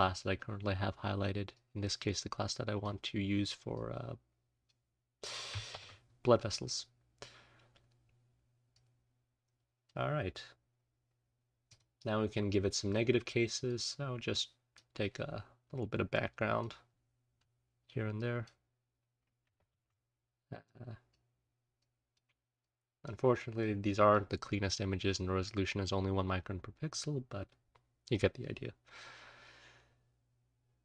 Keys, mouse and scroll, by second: 1.5-2.9 drag, 3.7-4.7 drag, 5.7 ctrl+z, 6.1-6.6 scroll down 2, 7.6-7.9 scroll down 2, 7.9-8.7 scroll up 1, 8.7-9.9 drag, 8.7-9.0 scroll up 1, 9.7-11.6 scroll up 1, 11.6 click, 12.8 click, 13.7-14.3 scroll up 1, 14.3 click, 14.3-15.7 scroll up 1, 16.1 click, 16.8-17.3 scroll down 1, 17.3-18.1 scroll up 1, 18.1 click, 19.5 ctrl+z, 20.6 click, 21.7 click, 22.5 click, 23.5 click, 24.5-25.0 scroll down 2, 25.0-26.4 scroll up 2, 26.4-27.0 scroll up 1, 27.0-28.9 scroll up 1, 28.9-30.8 scroll up 1.